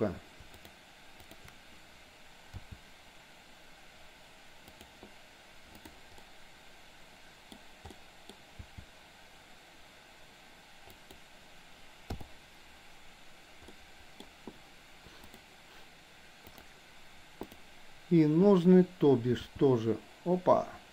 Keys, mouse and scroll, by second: 0.6 shift+click, 2.5 g, 5.8 click, 6.2-7.5 middle drag, 8.0-8.3 middle drag, 8.7 g, 12.1 i, 13.7 middle click, 15.3 drag, 16.6 drag, 17.5 click, 19.5 g.